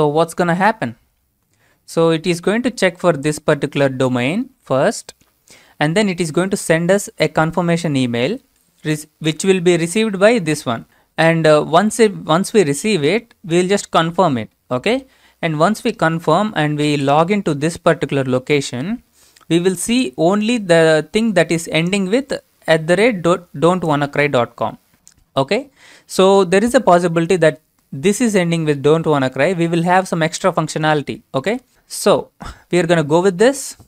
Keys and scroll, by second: 0.5 ctrl+v, 22.3 alt+Tab.